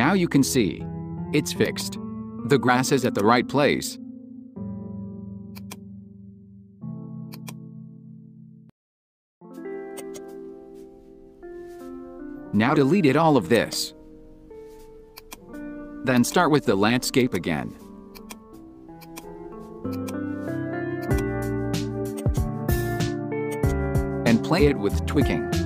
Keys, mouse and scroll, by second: 1.6 click, 3.0-5.7 drag, 7.4-9.9 drag, 10.1 right click, 12.5 Delete, 13.7 right click, 15.2-16.3 drag, 17.2 click, 18.2 click, 19.9 click, 21.0-22.3 drag, 22.3 right click, 23.7 right click, 25.0-25.6 middle drag.